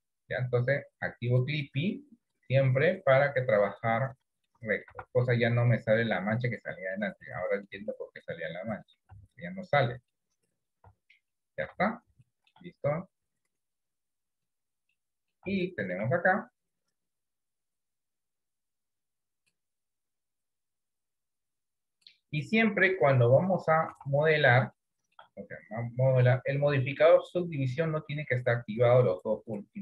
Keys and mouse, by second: 1.4 click, 2.3 click, 3.9 shift+middle click, 4.7 middle click, 5.0 Tab, 5.4 middle click, 6.5 shift+middle click, 7.3 middle click, 8.0 shift+middle click, 8.6 middle click, 9.2 Tab, 10.2 middle click, 11.2 Tab, 11.5 middle click, 11.9 Tab, 12.3 shift+middle click, 15.1 middle click, 15.7 shift+middle click, 17.1 click, 17.8 click, 20.4 click, 22.9 click, 23.8 middle click, 24.1 Tab, 24.9 middle click, 27.4 click, 27.7 click.